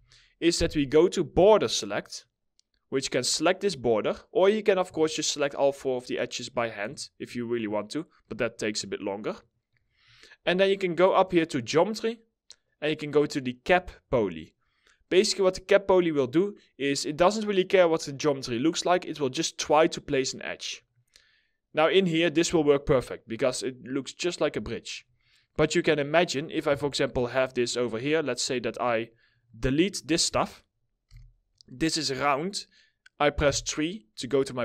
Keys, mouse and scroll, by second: 4.4 2, 6.7 ctrl+click, 8.0 ctrl+click, 8.9 ctrl+click, 21.8-22.2 scroll down 1, 23.0 alt+middle click, 23.6 middle click, 24.3 alt+middle click, 24.7 middle click, 25.9 scroll up 1, 26.3 4, 27.4 ctrl+click, 27.6 ctrl+double click, 27.9 ctrl+click, 30.5 Delete, 32.9 3.